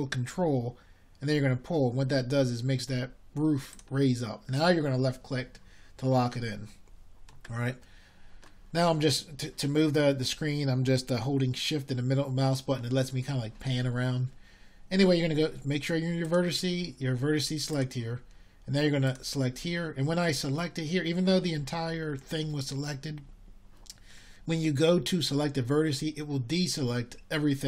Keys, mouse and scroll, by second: 13.7-27.6 middle drag.